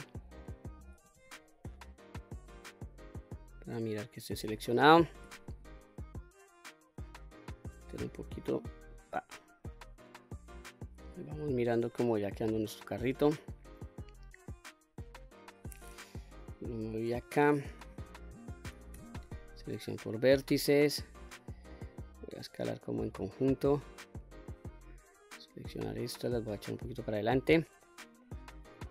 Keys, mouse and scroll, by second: 1.1 q, 2.4-3.7 middle drag, 4.2 middle click, 5.3 s, 5.5 x, 8.9 click, 9.4 scroll down 1, 9.6-11.0 middle drag, 11.3 q, 11.7-15.6 middle drag, 16.2 KP_1, 17.8 q, 18.9 1, 19.4 click, 20.1 middle click, 21.5 s, 23.1 click, 23.5-24.5 middle drag, 25.0 click, 26.0-27.0 drag, 27.5-27.8 scroll down 1, 27.8 middle click, 28.4 click, 28.8 middle click.